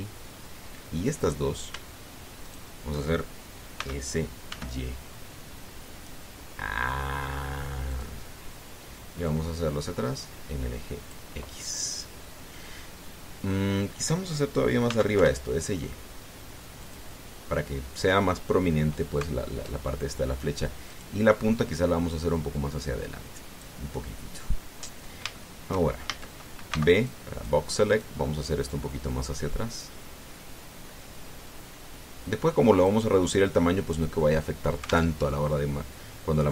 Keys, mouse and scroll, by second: 0.6 click, 2.0 right click, 3.2 shift+right click, 4.6 s, 5.3 y, 8.7 click, 10.0-12.1 drag, 15.6 s, 15.9 y, 17.6 click, 21.7 right click, 22.4-24.6 drag, 26.1-27.5 shift+middle drag, 26.8 shift+a, 27.5 b, 27.8 click, 28.8 click, 29.5-33.9 drag, 35.9 alt+Tab.